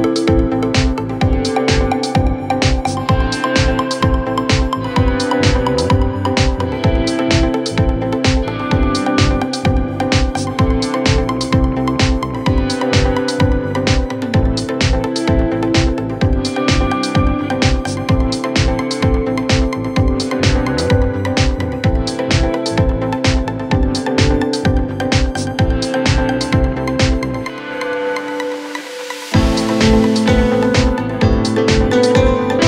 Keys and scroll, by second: 17.1 ctrl+z.